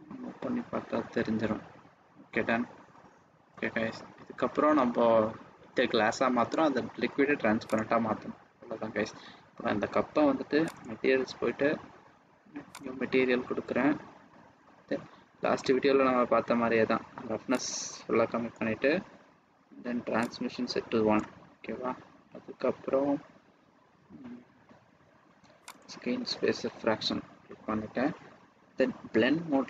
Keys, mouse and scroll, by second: 7.6 click, 12.7 click, 15.5-16.4 scroll down 9, 17.6 click, 18.9 scroll down 2, 20.1 click, 21.5-22.5 scroll down 5, 24.0 scroll down 1, 24.1-24.6 scroll down 1, 25.7 click.